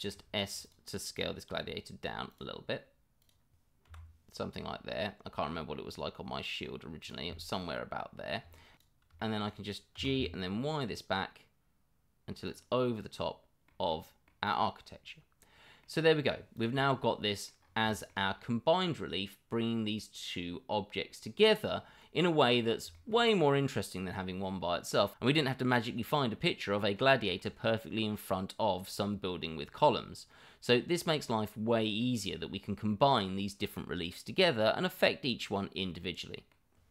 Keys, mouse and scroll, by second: 0.6 click, 3.2 click, 7.3-8.3 middle drag, 8.5 middle drag, 8.8 middle drag, 9.2 middle click, 9.7 click, 10.0 middle drag, 12.7-13.6 middle drag, 13.9-14.2 middle drag, 14.4 click, 14.8-15.8 middle drag, 16.5 click, 16.8-17.4 middle drag, 17.9 middle drag, 18.6-21.7 middle drag, 22.2 middle click, 22.9 middle drag, 23.3-24.4 middle drag, 25.5 middle click, 27.1-27.5 middle drag, 28.7-29.2 middle drag, 29.3 middle drag, 29.7-30.5 middle drag, 31.1 middle drag, 31.8 middle drag, 32.6-33.1 middle drag, 33.8-36.9 middle drag.